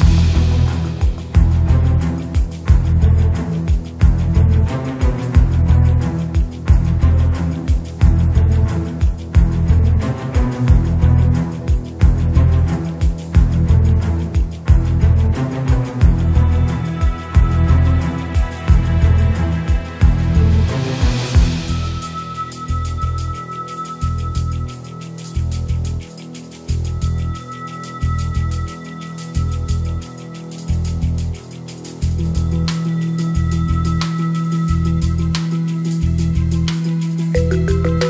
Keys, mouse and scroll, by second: 0.1 g, 1.5 s, 2.7 g, 3.6 shift+a, 5.1 g, 6.0 s, 7.2 s, 8.7 g, 10.4-11.6 drag, 11.7-13.3 drag, 14.1-15.5 drag, 21.3 click, 23.2 click, 24.0-25.4 shift+drag, 26.3 shift+a, 28.1 g, 29.2 s, 30.0 s, 31.0 s, 33.5 g, 34.8 s, 36.3 shift+click.